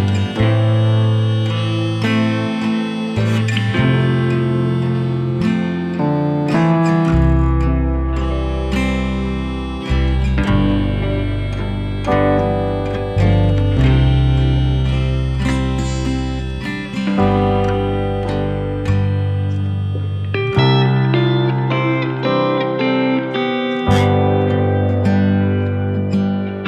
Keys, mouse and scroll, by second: 3.1 ctrl+right click, 3.5 scroll down 1, 3.9-4.5 scroll up 1, 5.1-10.3 shift+drag, 10.3 scroll up 1, 12.6 click, 15.3-20.3 drag, 20.9 scroll down 1, 21.4 scroll up 1, 21.8 click, 22.1 scroll down 1, 23.3 shift+click, 24.3 scroll up 1, 25.3 shift+click.